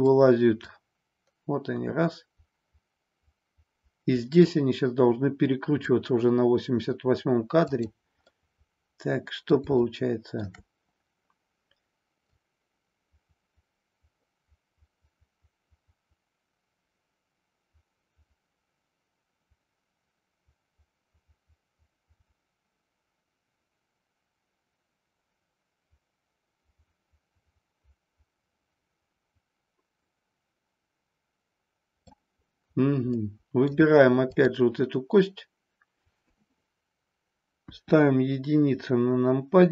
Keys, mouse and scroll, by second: 0.6-5.9 drag, 7.7 click, 8.2-9.5 middle drag, 9.9-10.4 shift+middle drag, 12.4-32.2 drag, 33.1-33.7 middle drag, 34.2-37.0 drag, 37.6 KP_1.